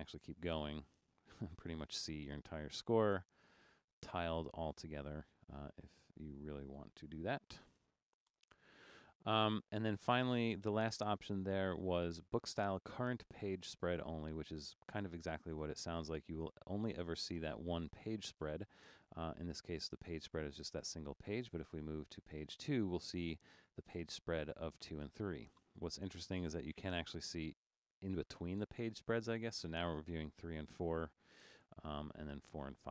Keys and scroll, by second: 0.0 super+-, 0.5 super+-, 1.8 super+-, 3.5 super+-, 6.9 super+0, 7.1-8.3 typing, 8.4 Return.